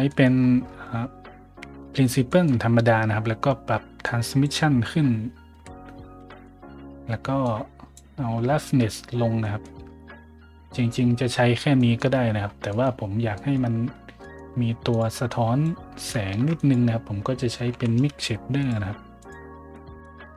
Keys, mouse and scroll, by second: 0.4 scroll up 1, 0.6 scroll down 1, 0.7 scroll up 1, 2.3 scroll down 1, 4.0-4.4 drag, 4.0 right click, 5.5 a, 6.3 middle click, 7.4-7.9 drag, 9.4 middle drag, 11.8 middle drag, 12.7 middle click, 13.3 middle drag, 14.2 middle click, 14.9 click, 14.9 right click, 15.3-15.6 drag, 15.3 right click, 16.3 shift+a, 16.6 click, 16.6 right click, 17.7 m, 18.0 i, 18.6 click, 19.2 click, 19.7 click, 20.3 shift+a.